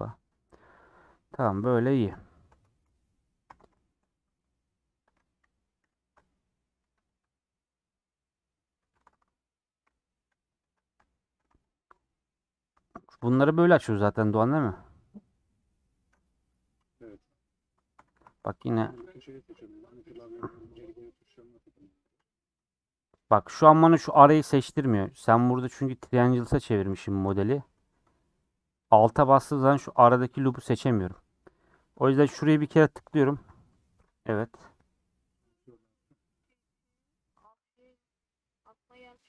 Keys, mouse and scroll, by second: 1.9 middle click, 2.5 Tab, 3.4 h, 3.8 middle click, 4.2 scroll up 1, 4.5 scroll down 3, 5.1 click, 5.8 /, 6.1 Tab, 6.3 middle click, 6.8 3, 7.1 Left, 7.5 middle click, 8.5 middle click, 8.9 3, 10.8 scroll up 1, 10.8 middle click, 11.3 3, 11.5 click, 12.1-13.2 middle drag, 13.8-15.6 middle drag, 15.6 click, 17.6-18.8 scroll up 2, 18.8 alt+click, 20.6 click, 22.0 click, 23.0-24.5 drag, 24.5-26.4 middle drag, 26.4-26.9 scroll up 3, 26.9-28.7 middle drag, 28.8-30.4 drag, 30.5 scroll down 4, 32.3 click.